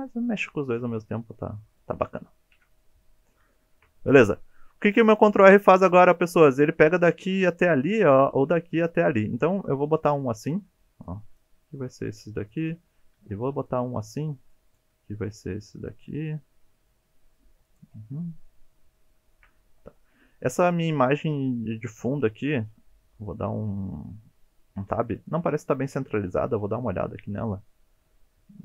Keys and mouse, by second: 2.5 KP_7, 3.6-3.9 shift+middle drag, 4.8 ctrl+r, 10.4 click, 11.1 click, 11.6 g, 12.5 click, 13.1 ctrl+r, 14.0 click, 14.6 click, 14.9 g, 17.6 click, 18.5 shift+middle click, 24.8 Tab, 26.6 n.